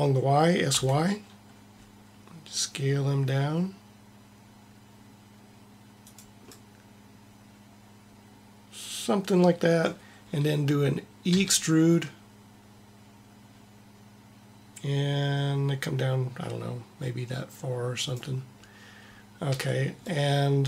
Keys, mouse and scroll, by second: 6.4-8.2 middle drag, 11.4 e, 19.5 a, 20.2-20.6 middle drag.